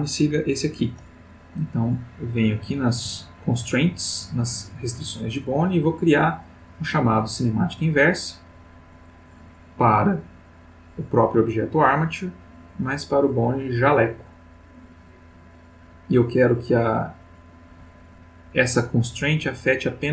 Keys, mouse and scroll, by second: 2.0 click, 5.6 click, 7.5 click, 9.0 click, 10.7 click, 13.1 click, 14.7 click.